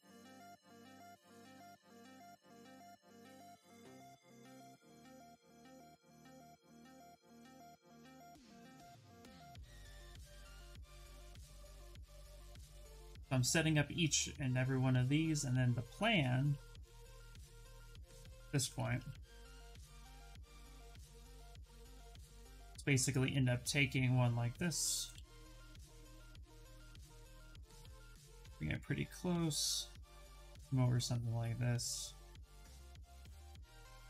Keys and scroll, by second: 17.7 q, 18.4 shift+f, 24.8 w.